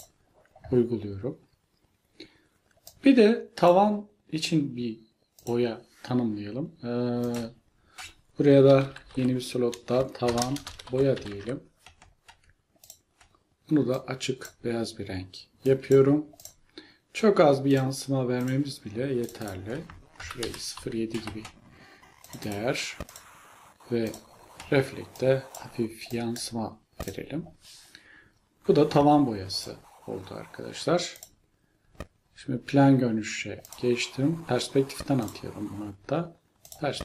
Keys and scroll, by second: 8.5-11.8 typing, 20.0-21.7 typing.